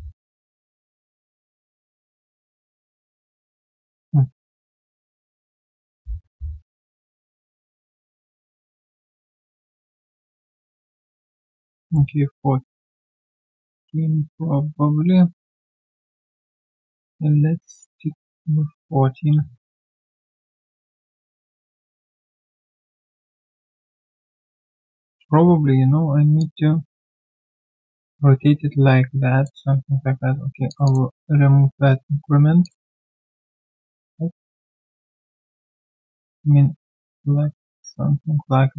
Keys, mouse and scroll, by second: 11.9 middle click, 20.8 typing, 22.5 typing, 25.2 typing, 30.8 double click.